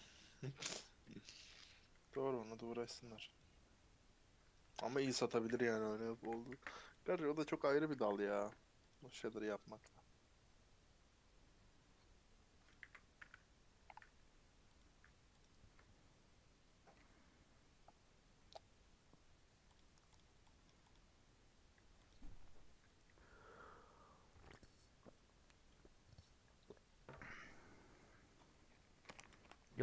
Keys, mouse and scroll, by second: 0.0 scroll up 2, 0.2-1.2 middle drag, 1.2 scroll down 3, 1.4 middle click, 1.6 scroll up 1, 1.9 a, 3.3 u, 4.6 Tab, 5.4 /, 5.8-6.1 scroll down 5, 6.1 a, 6.9 ctrl+a, 7.4 Tab, 7.7 a, 8.9 u, 12.8 a, 15.4-20.1 drag, 20.8 click, 22.1-29.8 drag.